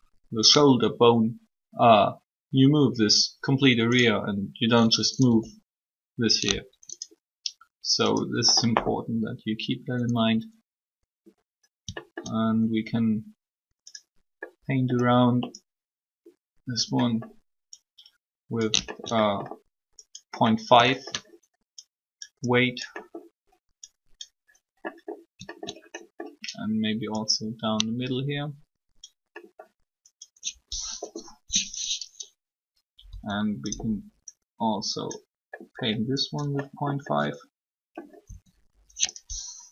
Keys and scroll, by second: 5.3 r, 31.0 3, 33.0 r, 38.2 r.